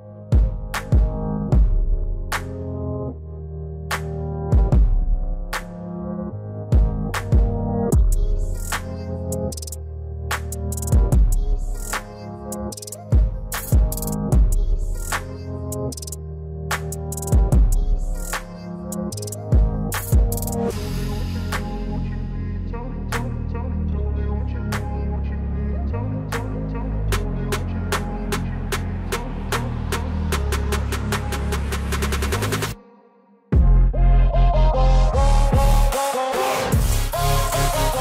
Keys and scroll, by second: 35.8 ctrl+z.